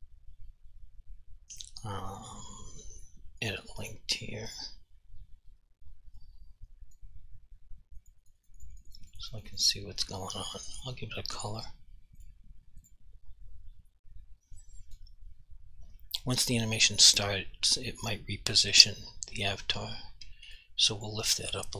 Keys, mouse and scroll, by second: 3.5 click, 3.9 double click, 4.6 click, 6.3 click, 8.1 click, 8.3 double click, 8.5 click, 8.7 double click, 8.8 click, 9.0 double click, 9.1 click, 9.3 double click, 9.5 click, 9.6 double click, 10.8 click, 14.1 alt+click, 17.0 click, 18.0 alt+click, 18.9 click, 20.6 right click, 21.1 click.